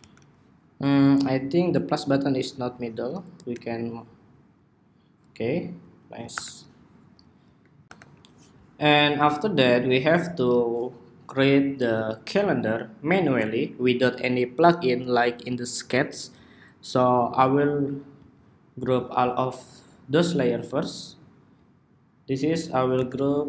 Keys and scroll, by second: 6.1 super+-, 7.8 super+=, 22.7 super+g.